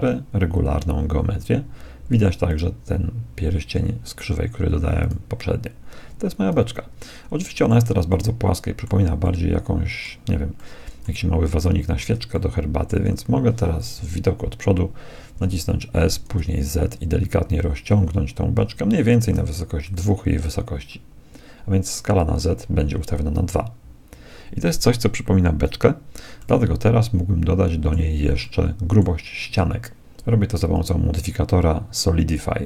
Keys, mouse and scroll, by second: 2.4-4.2 right drag, 5.0-6.9 right drag, 6.5 z, 7.1-14.2 middle drag, 14.0 KP_1, 15.3 s, 26.4-28.2 middle drag, 28.6-30.4 middle drag, 30.6-32.6 drag.